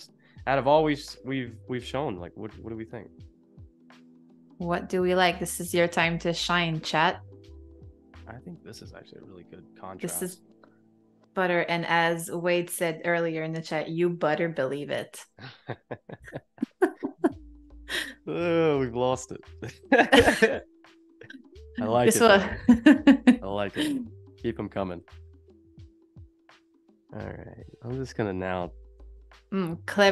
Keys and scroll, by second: 20.4 super+=, 21.0 space, 22.2 a, 24.4 shift+b, 28.9 super+z, 29.6 ].